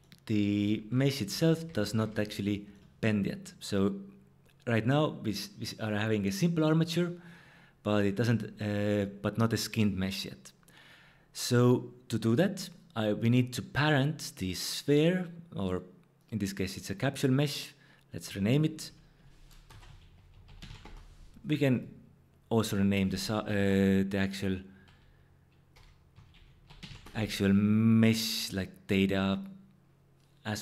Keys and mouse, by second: 0.6 ctrl+z, 0.9 ctrl+z, 1.3 ctrl+z, 1.7 ctrl+z, 2.0 ctrl+z, 6.0 click, 15.6 click, 16.2 click, 16.8-17.8 drag, 18.8 F2, 22.6 F2, 29.3 click.